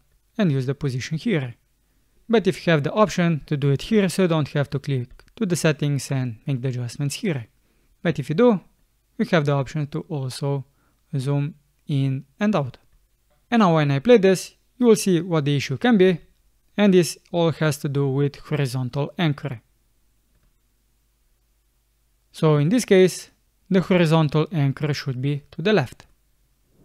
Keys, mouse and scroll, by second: 16.1 space, 23.8 space.